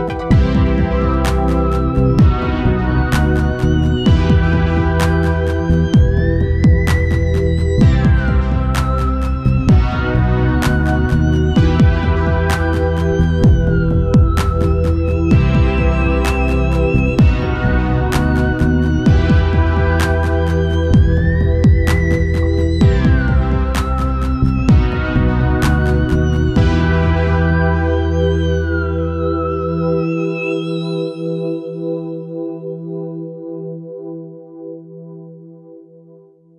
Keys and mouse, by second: 0.6 ctrl+s, 2.1 click, 2.5 click, 3.1 t, 8.2 Tab, 8.2 click, 8.5 a, 8.7 a, 9.4 u, 12.8-33.9 drag, 36.0-36.5 drag.